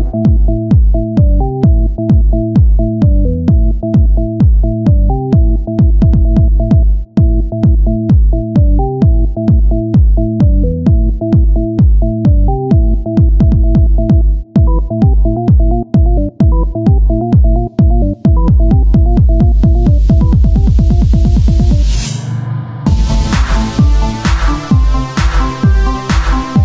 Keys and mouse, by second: 13.3-14.8 drag, 25.5 KP_0.